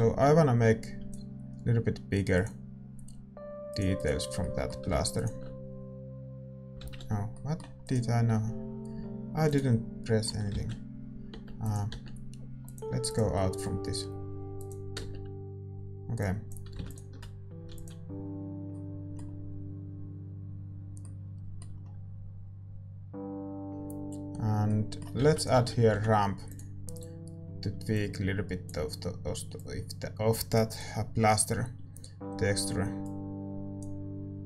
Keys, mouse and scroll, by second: 9.6 ctrl+z, 9.9-13.5 drag, 13.5 ctrl+z, 13.6 Tab, 13.6-18.7 drag, 13.6-17.9 middle drag, 17.9 Tab, 17.9 ctrl+s, 21.1-26.9 middle drag, 26.9 shift+a, 28.4-34.4 drag.